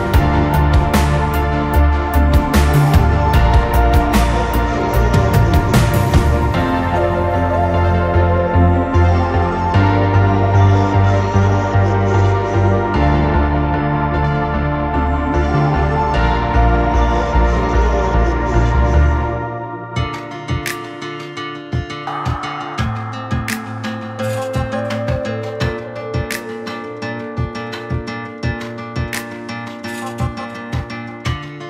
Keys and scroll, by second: 14.3 2, 15.3 3, 16.1 Return, 25.1 4, 25.8 6, 26.5 Return.